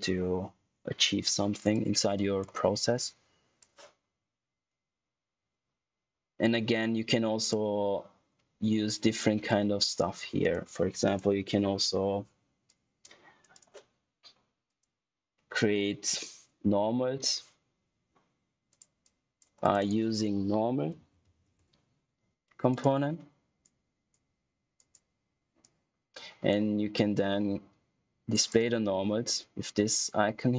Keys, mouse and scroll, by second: 1.6 click, 6.3 click, 10.3 click, 11.0 right click, 12.6 click, 18.6 click, 19.7 right click, 20.4-21.9 typing, 22.6 click.